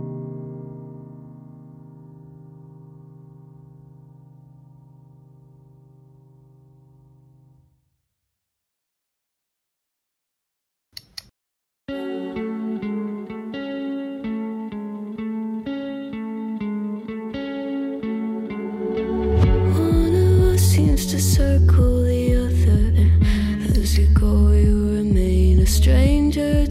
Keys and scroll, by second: 5.1 ctrl+z, 9.5 ctrl+z, 10.3 ctrl+z.